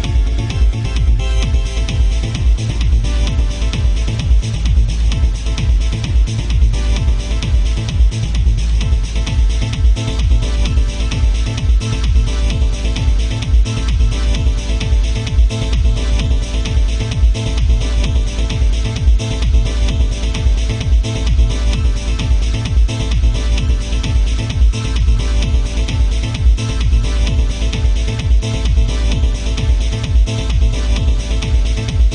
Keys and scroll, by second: 10.6 ctrl+z, 23.5 ctrl+z, 26.9 ctrl+z.